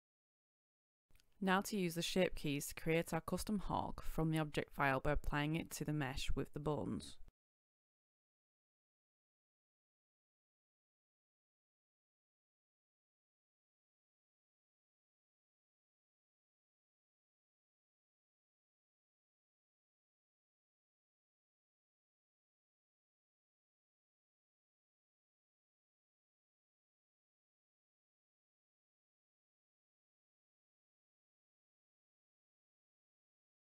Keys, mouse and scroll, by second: 0.6 shift+click, 1.1 scroll up 1, 1.8-2.6 ctrl+scroll, 3.0 ctrl+scroll, 3.5-4.1 scroll down 1, 4.1 right click, 4.9 shift+right click, 7.0 middle click, 8.1-18.0 drag, 21.6 right click, 23.0 shift+right click, 23.7 shift+h, 24.6 right click, 25.8 shift+right click, 27.6 click.